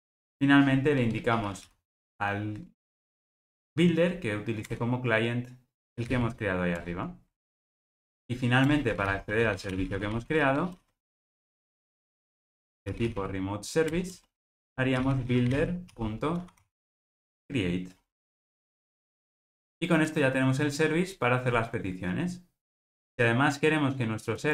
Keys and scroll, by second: 4.7 Return, 13.9 Return, 18.4 Return.